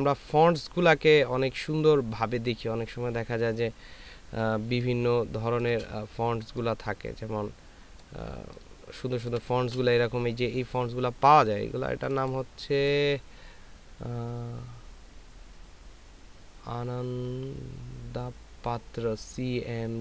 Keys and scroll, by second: 5.0 ctrl+space, 8.7 ctrl+space.